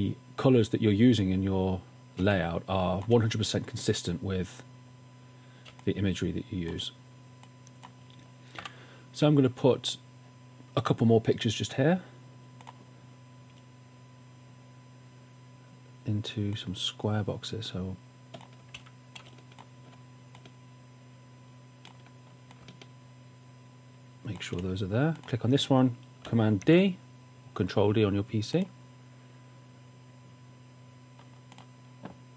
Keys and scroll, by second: 2.2 space, 6.0 space, 8.8 w, 18.8 v, 26.7 super+d.